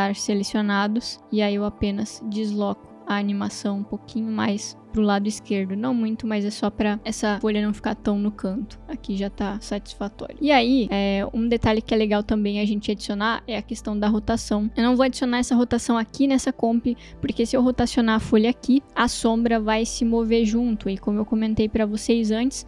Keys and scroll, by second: 18.9 r.